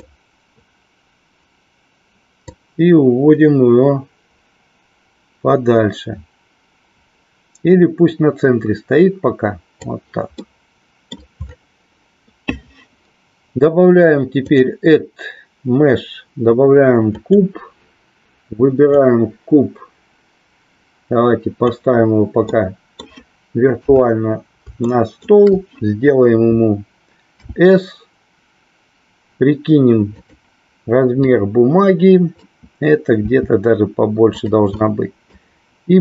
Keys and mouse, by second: 2.4-9.9 drag, 10.4 middle click, 14.5-17.5 drag, 18.9-21.8 drag, 22.5 middle click, 23.9 KP_3, 24.9 middle click, 31.2-32.5 drag, 34.4 click, 34.8 middle click.